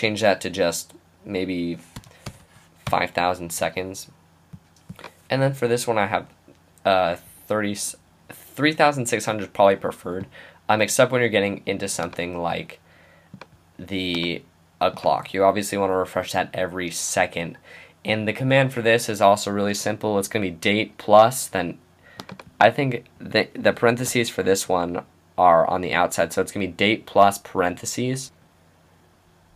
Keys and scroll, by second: 1.7-3.3 typing, 24.4 Right, 25.7 Left, 27.6 Right.